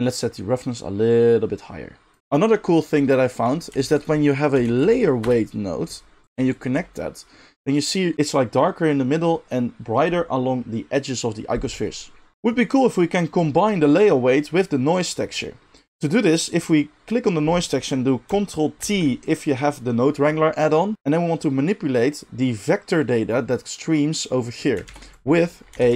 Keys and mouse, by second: 0.5-6.3 drag, 3.7 shift+a, 6.3 ctrl+shift+middle drag, 6.5 ctrl+shift+click, 6.5-8.7 ctrl+shift+middle drag, 15.7 click, 16.4 drag, 18.7 ctrl+t, 20.9 g, 24.8 shift+a.